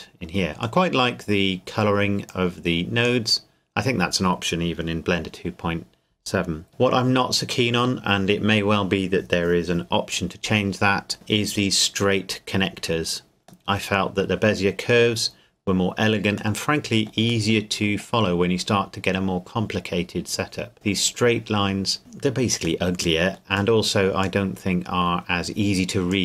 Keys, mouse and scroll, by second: 2.3 click, 3.4-5.7 scroll down 1, 6.7 middle click, 13.7 middle click, 14.5-16.8 scroll down 1, 17.5 middle click, 20.4-21.9 scroll up 1, 22.0-22.6 scroll down 1, 22.6-24.4 scroll up 1, 24.4 middle click, 25.0-26.1 scroll up 1, 26.1 click.